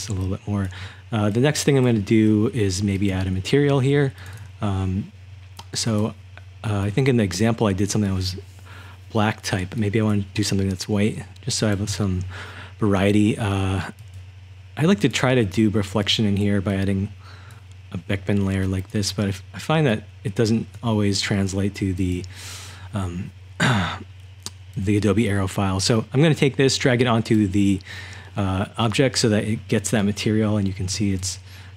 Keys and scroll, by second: 0.0-1.9 typing, 30.7-31.7 typing.